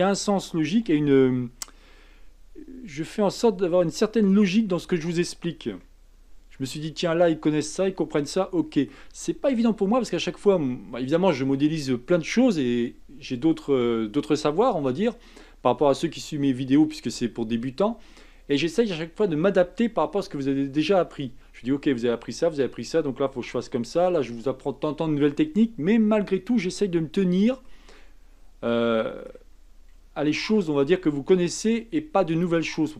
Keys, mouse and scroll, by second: 0.9 s, 5.8-11.4 shift+middle drag, 27.6-30.3 shift+middle drag, 30.3 shift+d.